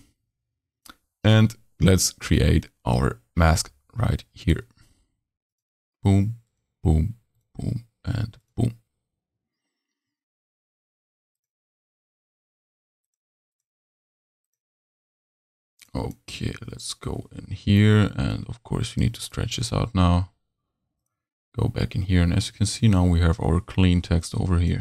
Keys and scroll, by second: 19.6 super+s.